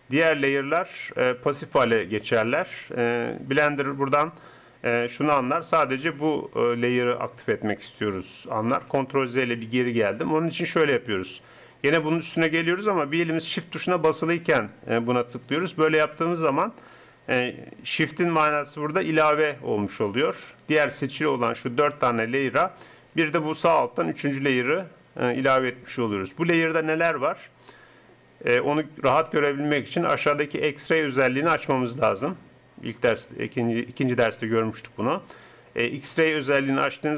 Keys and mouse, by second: 8.8 ctrl+z, 14.5-25.8 drag, 30.9-34.8 drag.